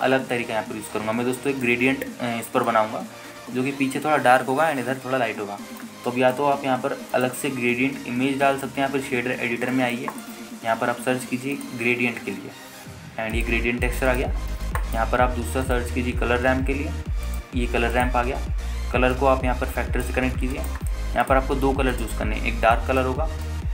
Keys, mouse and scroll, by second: 1.2 scroll down 2, 2.8-3.9 drag, 4.1 scroll down 1, 4.6-5.8 scroll up 2, 8.3-9.8 drag, 10.9 middle click, 11.3 click, 11.7 shift+a, 15.5-15.9 scroll up 2, 16.0 middle click, 16.5 shift+a, 19.3-20.3 scroll up 2, 20.3-21.3 drag, 21.5-22.3 scroll up 3, 21.7 middle click, 22.4 click, 23.1 click.